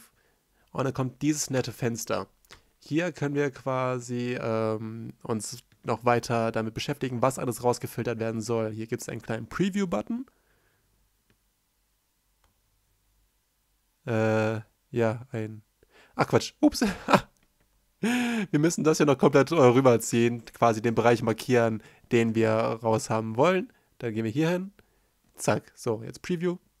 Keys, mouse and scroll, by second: 16.9 right click, 17.0 right click, 23.0 right click, 23.1 right click.